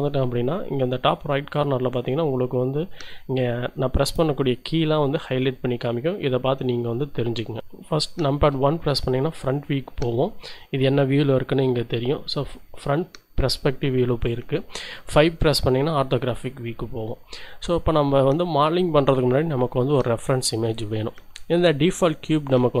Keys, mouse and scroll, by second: 8.5 KP_1, 15.0 KP_5.